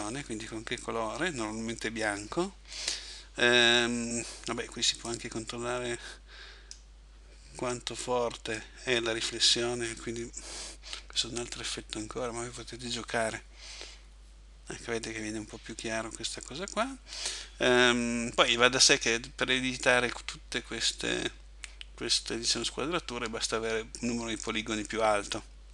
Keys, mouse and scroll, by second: 5.1 click, 8.1 click.